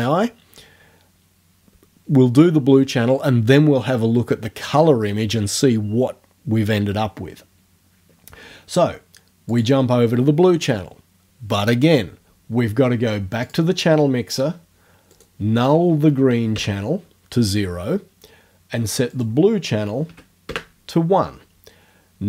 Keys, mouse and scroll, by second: 9.6 click, 13.4 click, 15.1 right click, 16.1 KP_0, 16.6 KP_Enter, 19.1 right click, 20.1 KP_1, 20.5 KP_Enter.